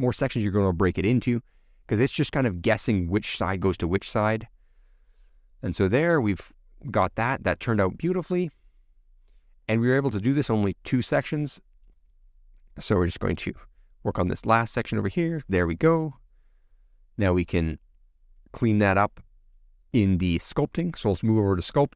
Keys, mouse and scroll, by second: 0.9 alt+shift+Left, 1.1 scroll down 2, 1.5 alt+shift+Left, 2.0 shift+middle click, 2.6 alt+shift+click, 2.9 shift+click, 3.1 alt+shift+click, 3.3-4.4 shift+middle drag, 4.4 alt+shift+click, 5.0 shift+middle click, 6.0 click, 6.1 scroll down 2, 6.3 shift+middle click, 7.0 scroll up 1, 7.2 middle click, 8.4 middle click, 9.1-10.4 shift+middle drag, 10.6 click, 11.4 middle click, 12.2 click, 12.4 click, 12.8 x, 12.8 middle click, 13.1 click, 13.2 shift+middle click, 13.9 alt+shift+click, 14.2 middle click, 15.0 click, 15.4-16.9 middle drag, 18.4-18.9 scroll down 8, 18.9-20.3 middle drag, 20.3-21.4 scroll down 4.